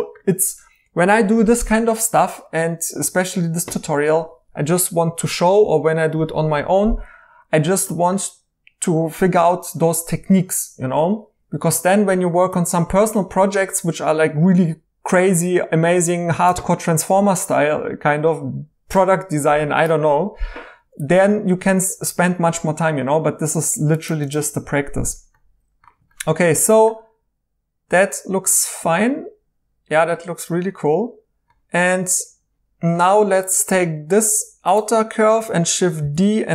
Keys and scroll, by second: 26.6 2, 36.0 d.